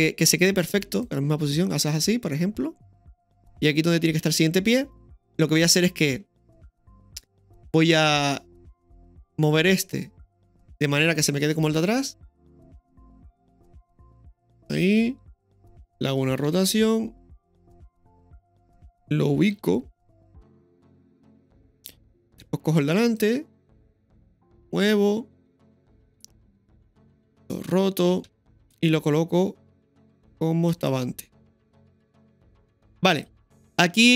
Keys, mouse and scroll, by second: 8.6 click, 10.1 click, 10.1 right click, 11.2-15.1 drag, 23.0 right click, 24.7-26.8 drag, 28.2 click, 31.6 g.